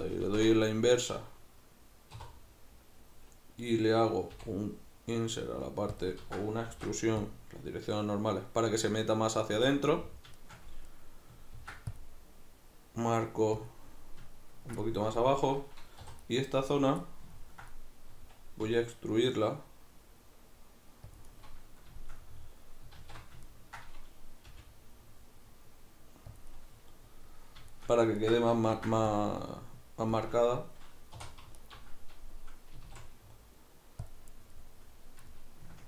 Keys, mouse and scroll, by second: 2.1 3, 4.4 i, 6.0 click, 6.2 ctrl+z, 6.7 alt+e, 9.7 click, 9.9-13.7 middle drag, 11.6 ctrl+r, 13.7 click, 14.9-16.3 middle drag, 16.1 3, 16.3 right click, 17.1-21.2 ctrl+middle drag, 18.7 e, 21.2 click, 21.3-26.4 middle drag, 23.0 alt+q, 24.5 g, 26.4 click, 26.5-30.3 middle drag, 28.7 ctrl+r, 30.3 click, 31.2 3, 31.6 alt+right click, 32.8 s, 34.1 click, 34.5-35.8 middle drag.